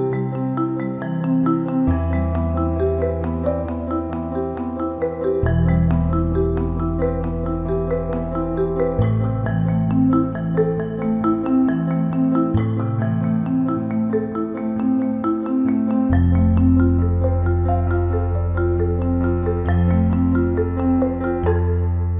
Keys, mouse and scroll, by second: 0.8-2.0 middle drag, 3.0 alt+middle click, 3.3 ctrl+alt+middle click, 4.1 right click, 4.4 alt+middle click, 5.8 shift+click, 6.1 alt+middle click, 6.7 alt+middle click, 8.2 shift+click, 8.5 alt+middle click, 9.1 alt+middle click, 9.3 ctrl+alt+middle click, 9.7 alt+middle click, 10.8 shift+click, 11.4 alt+middle click, 18.5 alt+middle click, 19.3 alt+shift+middle click, 19.6-20.9 alt+middle drag, 21.3 ctrl+z.